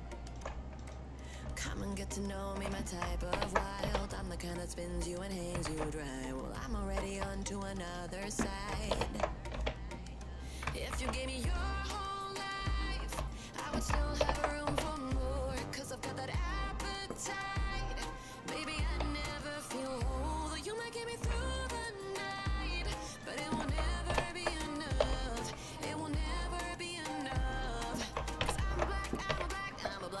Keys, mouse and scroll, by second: 0.3 shift+click, 0.8 click, 1.8 shift+click, 3.4 ctrl+j, 3.9 h, 6.0 ctrl+z, 7.3 shift+click, 7.8 shift+click, 9.0 ctrl+j, 9.6 h, 11.2 ctrl+z, 13.3 shift+click, 14.3 ctrl+j, 14.7 h, 16.9 click, 19.4 shift+click, 20.4 shift+click, 21.1 shift+click, 21.5 click, 22.3 click, 23.1 shift+click, 24.2 ctrl+j, 25.1 h, 26.3 click, 26.8 click, 27.5 shift+click, 28.5 ctrl+j, 29.3 h, 29.8 click.